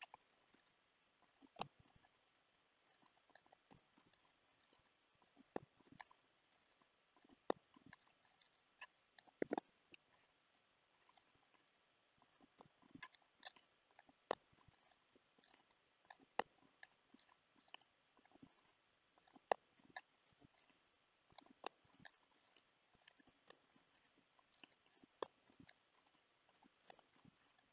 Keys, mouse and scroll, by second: 0.3 click, 0.5 click, 1.6 p, 2.9 click, 3.0 click, 3.7 p, 4.5 click, 4.9 click, 5.6 p, 6.2 scroll down 3, 6.5 click, 6.8 click, 7.4 p, 8.1 click, 9.5 ctrl+z, 10.5 click, 11.2 click, 11.7 click, 12.6 p, 13.4 click, 13.7 click, 14.3 p, 15.1 scroll down 2, 15.4 click, 15.5 click, 16.4 p, 17.1 click, 17.5 click, 17.9 click, 18.4 click, 18.8 click, 19.5 p, 20.2 click, 20.4 scroll down 5, 20.7 click, 21.6 p, 22.3 click, 23.4 p, 24.1 scroll down 3, 24.4 click, 24.9 click, 25.2 p, 25.9 click, 26.2 click, 26.8 p, 27.6 scroll down 1.